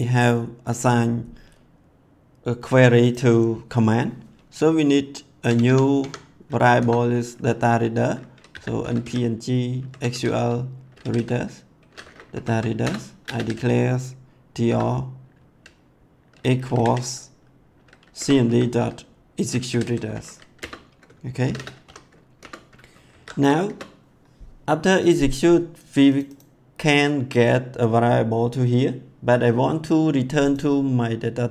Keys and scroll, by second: 5.4 Tab, 6.8 Return, 8.2-11.6 typing, 12.3 Down, 12.8 Return, 13.1-14.6 typing, 16.8 v, 18.1 Return, 18.4-20.3 typing, 20.5 Return, 21.3 shift+9, 21.8 ;, 22.3 Return, 22.8 ctrl+s, 23.6 Return.